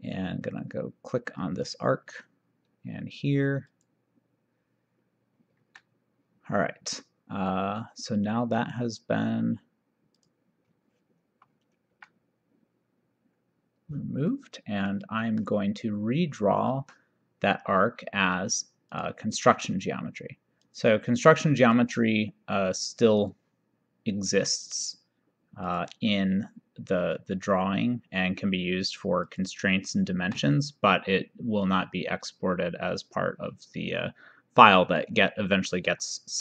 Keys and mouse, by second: 1.7 click, 3.8 click, 5.6 Escape, 10.2 click, 15.0 middle click, 19.0 click, 20.8 click, 23.3 click, 25.7 click, 29.4 click, 30.2 Escape, 31.7 click, 33.1 click.